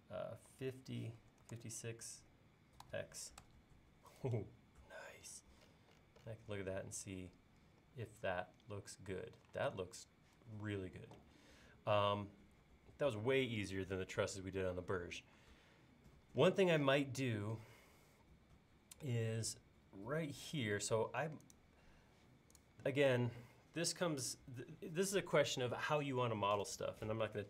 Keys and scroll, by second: 0.6 7, 1.2 BackSpace, 2.9 x, 3.5 Return, 9.8 space.